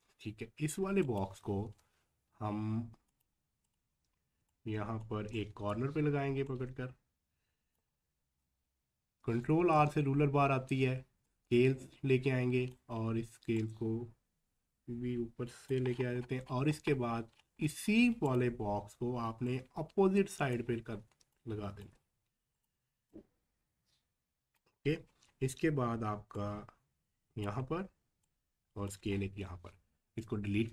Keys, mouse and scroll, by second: 1.6 v, 3.1 click, 3.9 scroll up 1, 4.7 click, 4.8 space, 5.3 click, 8.5-9.2 scroll up 1, 17.0-17.4 scroll down 1, 18.2 click, 20.7 scroll up 1, 21.3 click, 21.7 space, 22.0 scroll up 1, 22.6-24.8 drag, 24.8 scroll up 1, 26.4-29.1 drag, 29.1 scroll down 1.